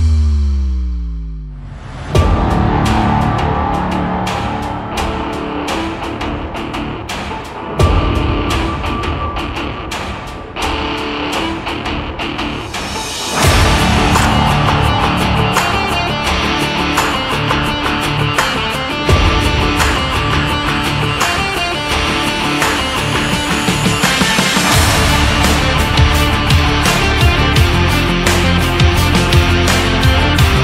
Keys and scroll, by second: 9.3 ctrl+Left, 20.9 shift+Down, 23.0 shift+Up, 24.0 shift+Down, 24.6 Down, 26.6 Up, 28.0 Down, 29.7 Down.